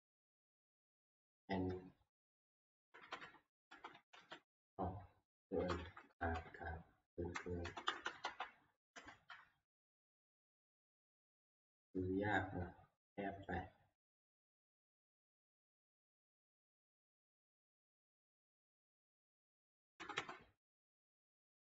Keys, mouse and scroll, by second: 2.8 Left, 3.0 Left, 3.2 Left, 3.7 Left, 4.2 ctrl+v, 5.8 Left, 5.8 Up, 6.0 Left, 6.1 Down, 6.5-7.3 Left, 7.7 Right, 7.9 Right, 8.0 Right, 8.3 Right, 9.0 Delete, 14.5-18.2 drag, 17.5-18.2 Left, 19.3 Left, 20.0 Left, 20.1 Left, 20.6 ctrl+v.